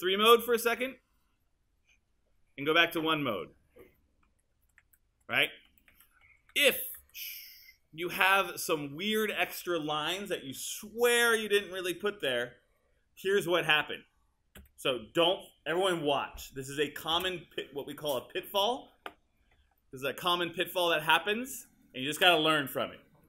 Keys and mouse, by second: 0.4 KP_3, 2.9-7.0 typing, 14.6 KP_1, 17.1 space.